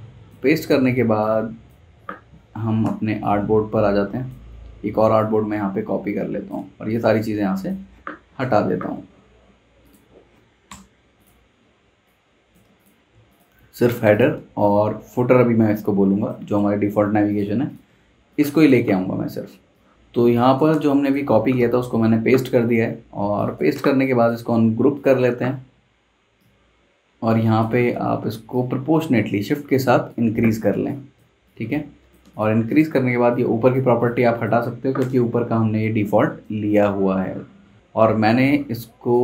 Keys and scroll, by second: 0.4 z, 0.8 z, 2.8 v, 8.4 BackSpace, 10.6 BackSpace, 17.8 z, 18.0 z, 19.9 z, 20.1 z, 20.7 v, 21.6 super+v, 23.2 z, 23.8 v, 30.7 space, 35.0 BackSpace, 37.8 super+z.